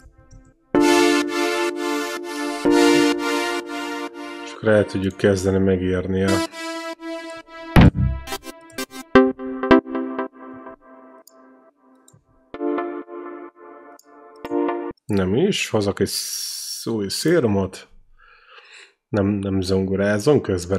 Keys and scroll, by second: 0.3 ctrl+v, 0.5 space, 3.2 space, 6.1 e, 7.3-10.7 typing, 10.8 ctrl+v, 12.4 space, 14.7 space.